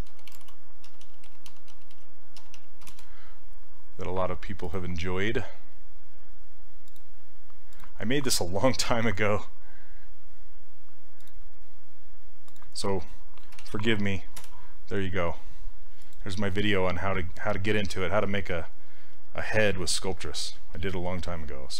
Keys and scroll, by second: 0.0-3.4 typing, 8.9 ctrl+c, 14.4 Return.